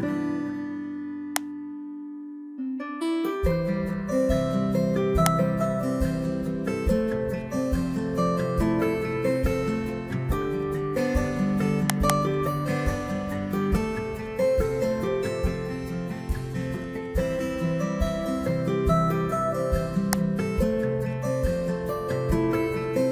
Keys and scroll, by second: 9.7 super+d.